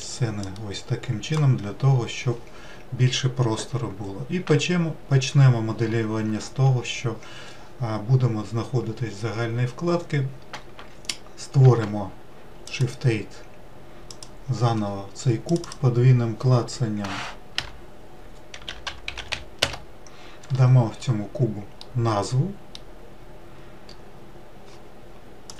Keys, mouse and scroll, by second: 14.2 shift+a, 15.5-21.8 drag, 21.8-25.5 middle drag.